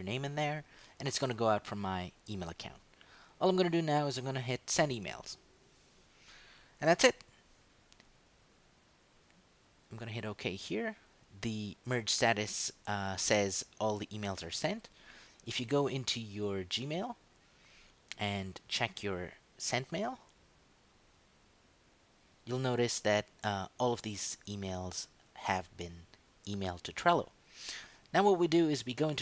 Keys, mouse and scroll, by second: 4.9 click, 10.4 click, 15.2 click, 16.8 click, 18.8 click, 21.1 click.